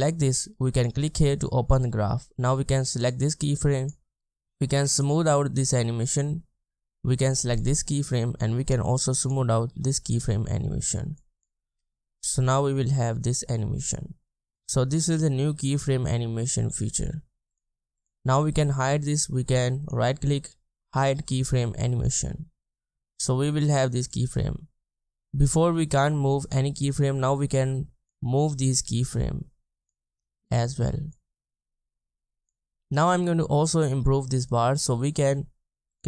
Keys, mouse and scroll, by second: 11.7 space, 14.5 space, 18.0 double click, 19.9 right click, 34.7-35.7 scroll up 1.